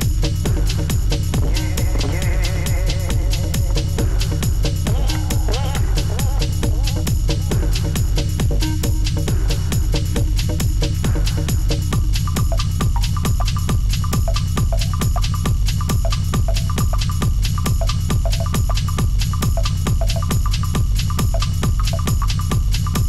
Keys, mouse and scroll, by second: 1.7 ctrl+shift+e, 2.4 ctrl+shift+a, 7.2 double click, 10.9 double click, 12.6 Return, 13.3-13.7 alt+scroll up 5, 13.7 space, 14.0 alt+scroll down 2, 14.4 space, 14.8 space, 14.8-15.3 alt+scroll down 1, 18.3 Return.